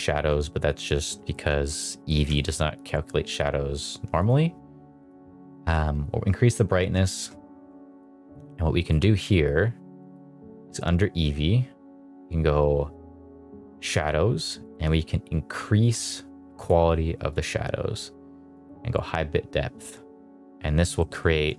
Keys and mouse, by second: 1.2 shift+middle drag, 1.5 middle drag, 2.0 middle click, 2.2 shift+middle drag, 4.1 click, 4.9 click, 7.0 shift+middle click, 7.9 click, 9.9 click, 13.7 click, 14.5-16.1 drag, 16.5-17.3 drag, 18.5 click, 20.9 shift+middle click.